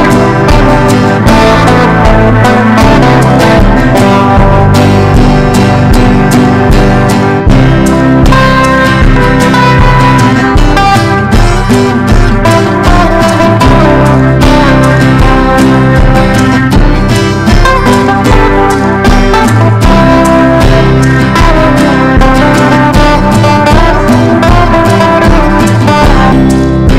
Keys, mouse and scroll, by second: 4.0 KP_0, 4.1 KP_1, 4.9 click, 5.5 ctrl+e, 6.4 click, 7.9 ctrl+b, 8.5 click, 10.4 Up, 11.6 click, 12.4 Up, 12.5 Up, 12.6 Up, 12.7 Up, 13.5-17.1 drag, 18.1-23.0 typing, 23.9-25.6 drag.